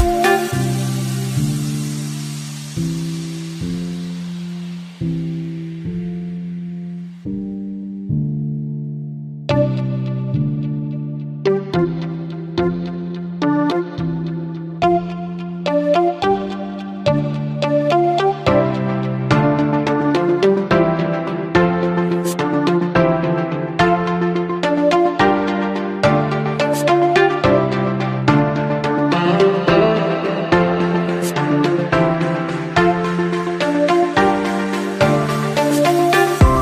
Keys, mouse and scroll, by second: 25.7-26.2 scroll up 1, 35.4-36.1 scroll down 1, 36.1-36.5 scroll up 1.